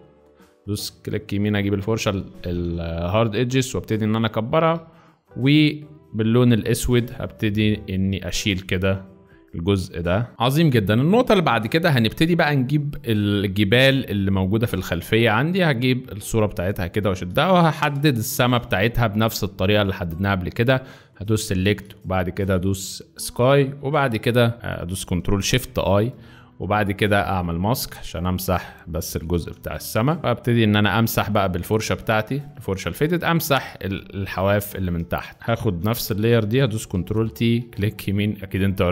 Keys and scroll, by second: 6.4 x, 6.9 shift+x, 10.3 z, 18.1 Return, 25.5 ctrl+shift+i, 29.5 v, 31.0 b, 33.9 x, 35.7 v, 36.3 ctrl+v, 36.9 ctrl+t.